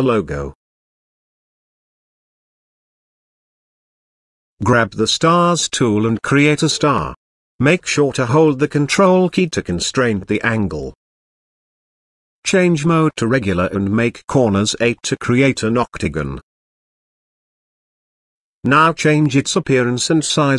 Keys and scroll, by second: 3.1 5.